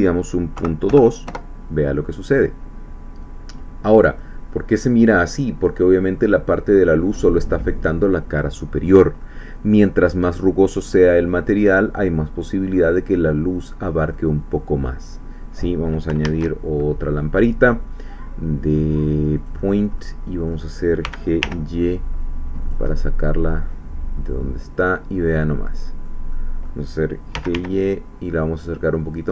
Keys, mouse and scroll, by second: 0.6 ., 0.9 2, 1.2 Return, 3.8 scroll down 2, 4.2-10.0 middle drag, 11.3-12.9 middle drag, 14.1-16.1 middle drag, 16.2 shift+a, 19.4 click, 20.0-21.0 middle drag, 21.0 g, 21.4 y, 22.6 click, 22.9-26.2 middle drag, 26.3 middle click, 27.3 g, 27.5 y, 29.1-29.3 drag.